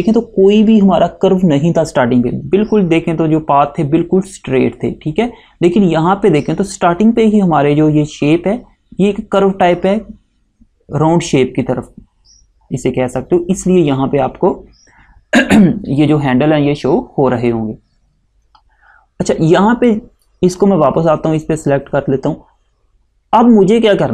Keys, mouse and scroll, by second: 20.0 click.